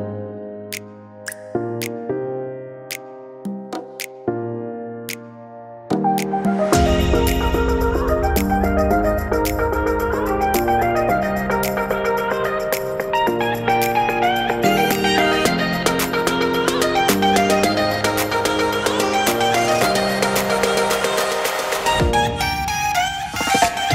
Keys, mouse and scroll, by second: 7.6-8.1 scroll up 2, 8.1 shift+middle click, 8.4 middle click, 12.9 click, 13.6 click, 13.8 click, 14.4 middle click, 14.4-15.0 scroll up 5, 15.6 middle click, 16.1-16.9 scroll down 5, 16.9 shift+middle click, 17.2 middle click, 22.7-23.1 scroll up 2, 23.1 shift+middle click, 23.5 middle click.